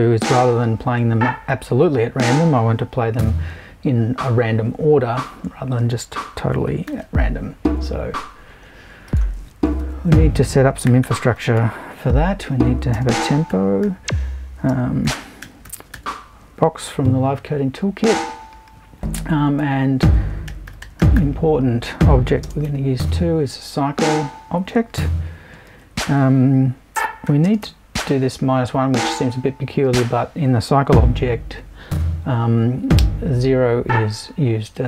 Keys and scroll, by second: 6.9 shift+super+t, 9.8 super+i, 10.8-15.9 typing, 19.6 super+i, 20.4-22.4 typing, 25.7 super+i, 27.4 space, 27.6 l.